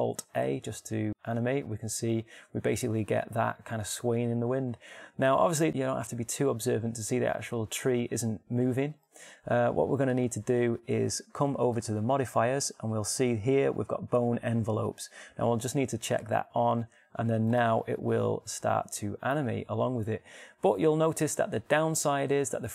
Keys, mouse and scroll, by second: 1.4 alt+a, 7.7-9.5 middle drag, 10.5 alt+a, 11.9-19.9 drag, 19.0 alt+a.